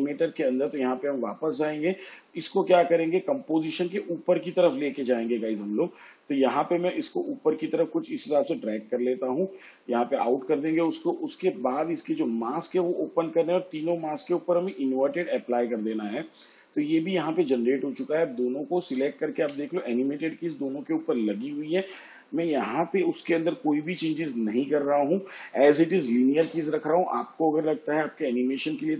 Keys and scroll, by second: 19.4 u.